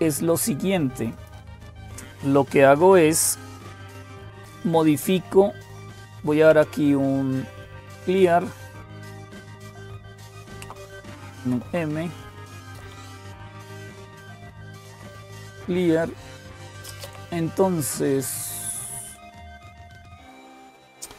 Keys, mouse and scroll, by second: 0.0-21.1 typing, 0.9 click, 11.2 super+m, 15.2 Return, 19.5 Return.